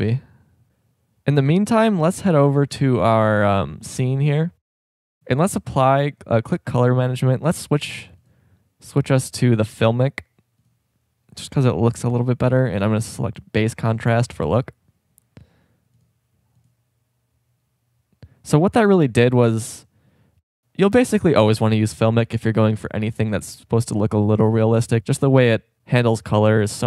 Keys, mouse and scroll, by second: 2.9 click, 6.1-6.8 drag, 7.7-10.2 drag, 12.2-14.2 drag.